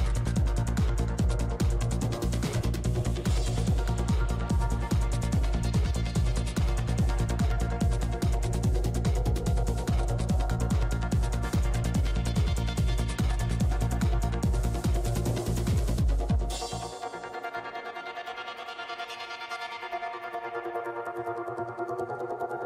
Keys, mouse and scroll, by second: 1.8-3.6 drag, 3.4 middle click, 3.8-5.0 drag, 4.7 middle click, 5.3 f, 5.6 click, 6.0-8.3 middle drag, 6.4-13.2 drag, 11.7-13.0 middle drag, 13.5 click, 13.9 click, 14.6 click, 15.5 click, 16.2 click, 17.5 click, 17.9 click, 18.2 click, 19.0 click, 19.6 click, 19.8 middle click, 20.3-21.8 drag, 20.3-21.3 middle drag, 21.8 ctrl+z.